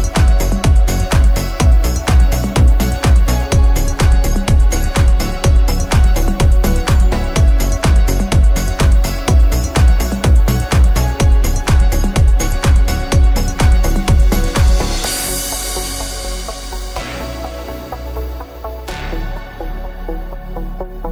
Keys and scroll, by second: 13.2 v.